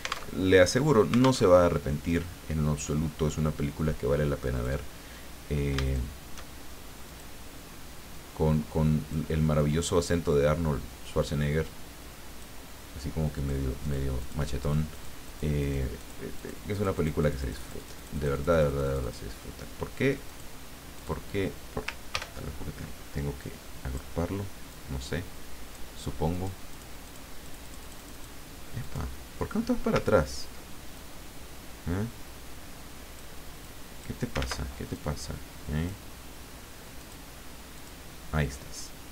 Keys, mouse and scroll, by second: 0.4 alt+Tab, 1.4 alt+Tab, 4.5 click, 5.8 shift+click, 7.1 click, 8.1-9.3 drag, 9.6-13.0 drag, 13.4 click, 13.8 click, 14.2 click, 14.6 click, 15.6 click, 16.0 click, 16.3 click, 16.7-19.3 drag, 20.2 click, 20.9 click, 22.1 ctrl+g, 23.3 click, 24.7-26.0 drag, 26.3 click, 26.7 click, 27.4-28.4 drag, 28.8 click, 30.3-31.0 ctrl+scroll down 2, 31.0-33.5 ctrl+drag, 33.6 click, 34.4 ctrl+z, 34.9-36.4 ctrl+drag, 37.0 click, 37.7 click.